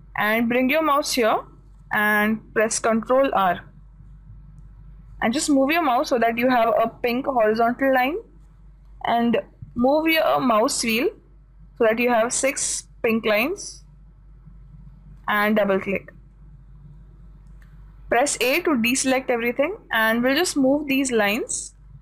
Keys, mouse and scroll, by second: 5.3 ctrl+r, 18.9 a.